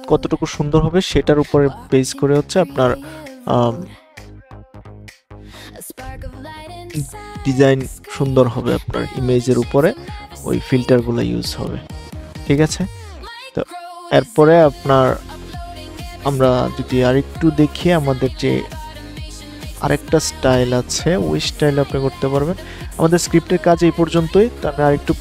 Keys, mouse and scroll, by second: 13.3 click, 17.8 click.